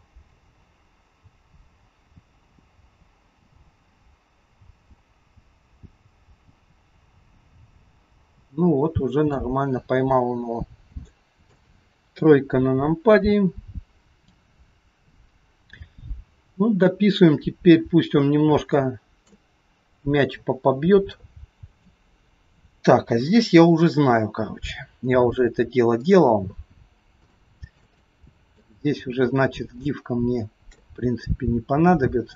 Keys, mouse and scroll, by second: 0.5 click, 10.0-11.0 scroll down 8, 11.1 shift+middle click, 12.2 KP_3, 17.6-18.6 scroll up 5, 18.8 shift+middle click, 18.8 shift+scroll up 1, 26.0 click, 26.9 scroll up 2, 27.3 shift+middle click, 28.1 middle click, 28.1-28.9 scroll up 1, 28.9-29.8 scroll up 3, 29.9 shift+middle click.